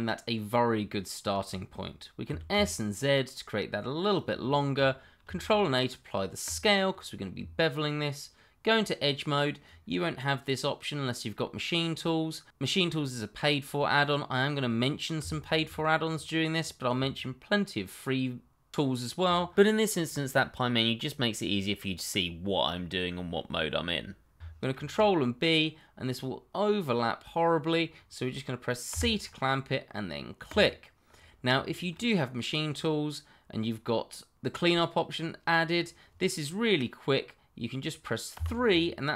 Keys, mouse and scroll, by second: 2.2 s, 2.5 z, 4.1 click, 4.5 middle click, 5.2 ctrl+a, 6.4 click, 7.3 Tab, 15.4 alt+click, 15.4 click, 17.4 middle click, 24.7 ctrl+b, 28.9 c, 30.5 click, 31.0 scroll up 1, 31.6 shift+middle click, 31.7 middle click, 31.8 shift+middle click, 38.3 3.